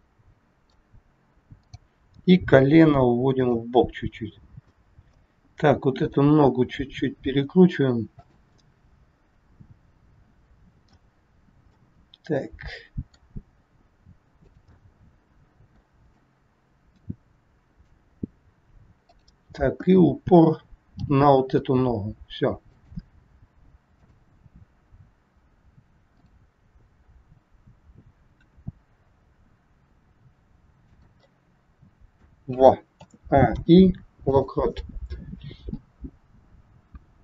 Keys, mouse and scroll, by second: 1.5 click, 2.5 g, 4.6 middle click, 5.9 click, 7.3 r, 8.6 middle click, 8.6 scroll up 1, 11.3-11.6 scroll down 2, 11.9 middle click, 13.6 r, 14.8 middle click, 16.3 middle click, 19.0 click, 20.9 g, 23.9 click, 26.1 click, 28.4 r, 31.2 middle click, 32.9 a, 33.4 i, 35.8 click.